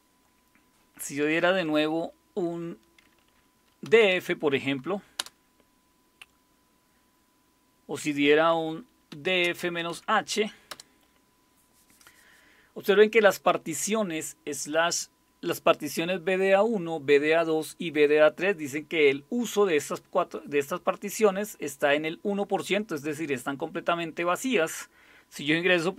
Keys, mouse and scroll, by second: 3.6-5.2 typing, 8.9-10.7 typing.